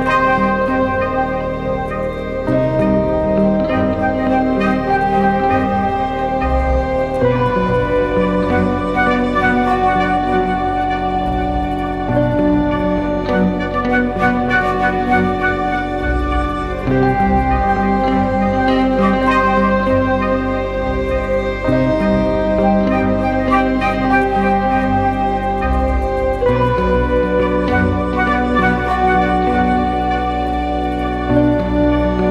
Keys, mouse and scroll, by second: 0.0-2.9 typing, 6.6 typing, 10.3-11.0 typing, 12.4-13.0 alt+scroll up 1, 13.0-13.5 alt+scroll down 1, 17.1-17.8 typing, 28.5-28.8 typing, 31.1 typing.